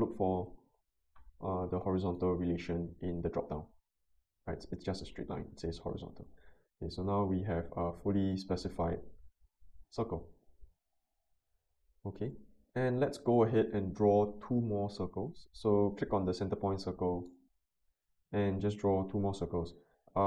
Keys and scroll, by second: 0.6 h.